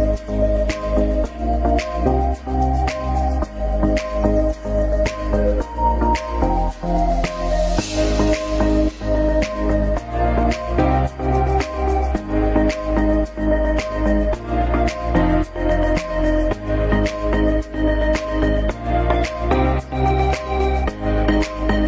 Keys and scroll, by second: 6.5 F2, 7.4 ctrl+u, 7.8 Escape, 9.1 ctrl+g, 10.9 c, 15.4 F4, 20.0 shift+F2, 21.5 F3.